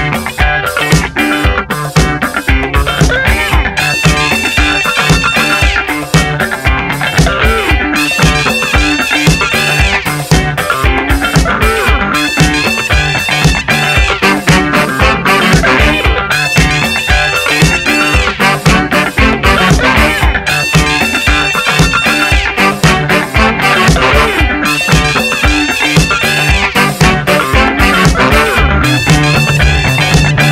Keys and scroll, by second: 0.7 Return, 3.0 ctrl+Return, 6.5-7.8 typing, 8.2 Return, 9.3 BackSpace, 9.9 ctrl+Return, 16.0 v, 17.5 Return, 17.6 v, 18.2 space, 18.9 v, 21.1 space, 22.9 F7.